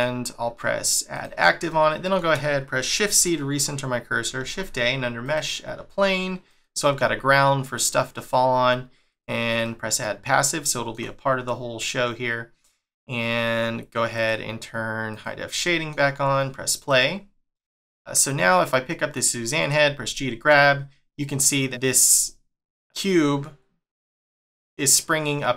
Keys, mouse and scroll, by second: 1.1 click, 1.7 shift+middle click, 3.0 shift+c, 4.4 shift+a, 5.7 s, 9.1 click, 9.6 middle click, 10.2-10.6 scroll down 1, 10.6 shift+middle click, 14.1 click, 15.6 middle click, 16.7 click, 18.2 click, 18.6 middle click, 19.8 g.